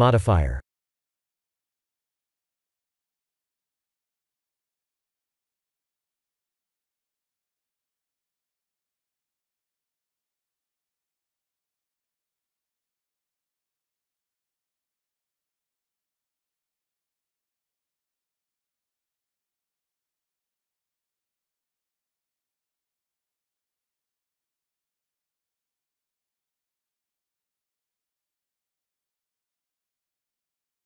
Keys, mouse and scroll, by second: 2.5 ctrl+z, 3.8 s, 5.7 s, 8.5 scroll up 1, 9.0 shift+middle click, 9.8 scroll up 3, 10.5 shift+middle click, 11.1 scroll up 2, 11.5 middle click, 12.7 middle click, 15.9 click, 16.6 click, 18.5-19.1 scroll up 7, 19.2 shift+middle click, 21.2 shift+click, 24.3 middle click, 26.2 shift+click, 29.9 middle click, 30.3 middle click.